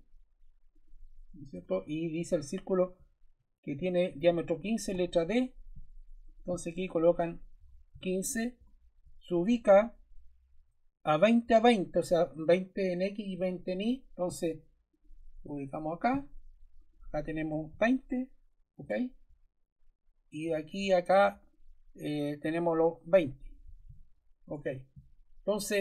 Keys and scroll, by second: 3.6 Escape, 4.9 d, 7.5 1, 7.8 5, 8.5 Return, 17.2-18.1 typing, 18.7 Return, 23.3-24.3 typing, 24.4 Return.